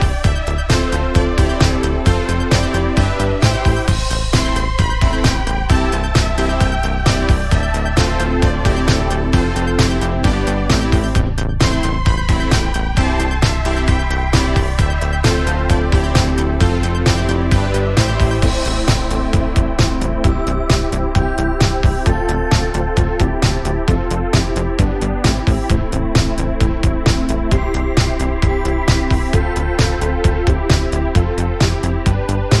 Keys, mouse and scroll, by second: 0.3 click, 0.8 click, 4.1 Tab, 4.3 scroll down 1, 4.5-5.6 middle drag, 5.6-6.1 scroll up 1, 6.1 Tab, 7.1-8.2 middle drag, 8.2-8.7 scroll down 1, 8.7 Tab, 9.0 scroll down 1, 9.2-11.1 middle drag, 11.6-12.1 middle drag, 12.1-12.7 scroll up 3, 12.7-13.3 shift+middle drag, 13.3 scroll up 1, 13.5 Tab, 14.2 click, 14.8 shift+click, 15.1 middle click, 16.0 ctrl+b, 18.1 click, 18.8 g, 20.1 middle click, 20.6 click, 20.9 g, 22.8 shift+middle click, 23.4 2, 23.7 click, 24.1 shift+click, 24.4 middle click, 25.0 click, 25.5 shift+click, 25.9-27.7 middle drag, 27.7 click, 28.7 middle click, 29.0 Tab, 29.3 scroll down 2, 29.4-31.2 middle drag, 31.7-32.6 middle drag.